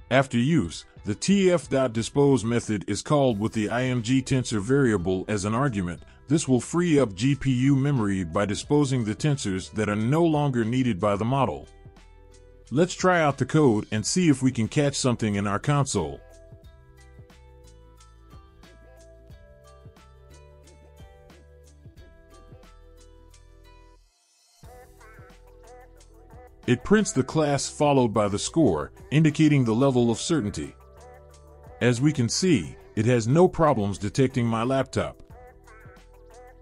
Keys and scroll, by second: 19.2 Return, 22.2 Return.